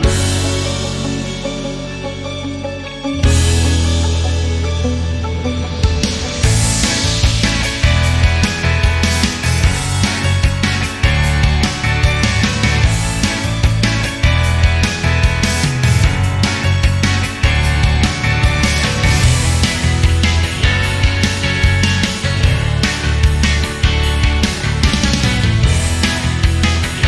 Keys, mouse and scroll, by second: 0.5 click, 1.3 scroll down 3, 1.6 shift+middle click, 2.2 s, 4.3-5.5 drag, 5.5 s, 7.8 scroll down 1, 8.0 r, 9.8 shift+d, 16.2-16.9 shift+right drag, 16.9 r, 19.4 click, 19.6 scroll down 2, 19.9-21.2 middle drag, 21.2-21.6 scroll down 5, 21.6-22.5 scroll up 11, 22.5-23.4 middle drag, 23.4 click, 23.8 shift+click, 24.0-24.6 middle drag, 24.6 click.